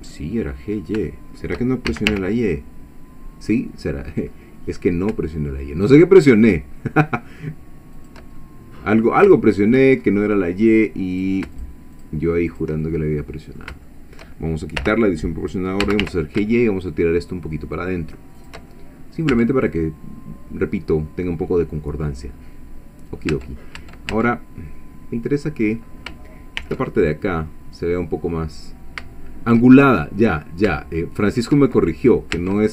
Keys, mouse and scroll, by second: 0.1 click, 0.7 scroll up 3, 1.1 shift+click, 1.9 shift+g, 2.1 shift+y, 3.8-4.3 scroll up 2, 8.0 shift+click, 8.4 shift+middle click, 9.4 shift+middle click, 10.0-10.4 shift+scroll up 1, 11.1 click, 11.6 shift+click, 12.0 shift+click, 12.5 shift+click, 12.8 shift+middle click, 13.9 shift+middle click, 14.8 o, 15.8 g, 16.0 y, 18.4 shift+click, 18.7 shift+middle click, 19.4 Tab, 19.7-22.2 middle drag, 22.3-22.7 scroll up 1, 22.8 scroll down 1, 23.3 Tab, 24.3-25.8 middle drag, 26.6 ctrl+r, 27.0 ctrl+click, 31.3 shift+click, 31.7 shift+middle click, 32.4 Tab.